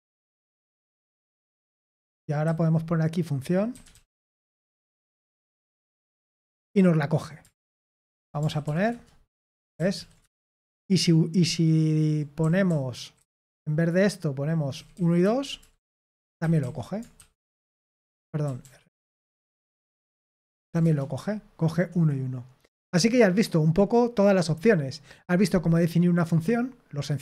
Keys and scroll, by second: 0.0-5.8 typing, 7.5-8.6 typing, 8.6 ctrl+p, 8.9 Return, 9.7 ctrl+p, 9.9 ctrl+p, 10.2 Return, 11.6-21.3 typing, 18.0 Escape, 25.9-27.2 scroll up 1.